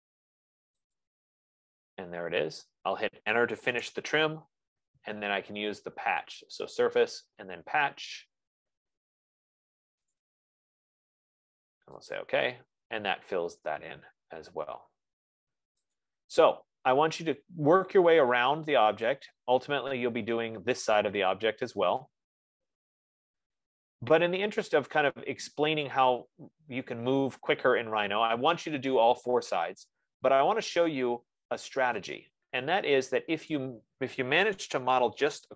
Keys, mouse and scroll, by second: 1.2-1.9 typing, 1.2 click, 4.0 Return, 6.7 click, 8.4-13.9 drag, 13.9 middle click, 14.0-15.4 scroll, 15.4-16.3 scroll, 16.3 click, 19.5 scroll, 25.0 right click, 26.1-26.4 scroll, 33.9 click, 35.4-35.5 typing.